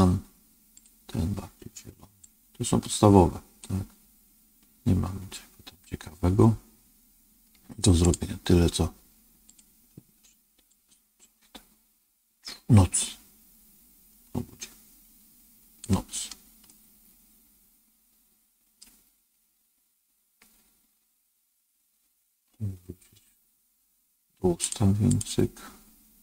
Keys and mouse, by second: 0.6 click, 16.6-18.7 middle drag, 24.5 click.